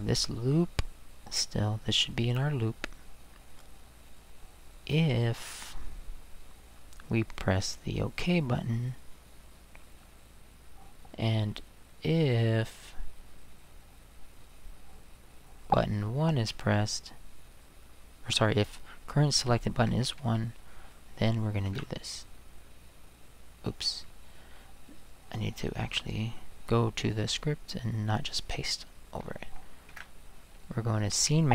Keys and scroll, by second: 19.9 1, 21.7 ctrl+v, 29.9 ctrl+v.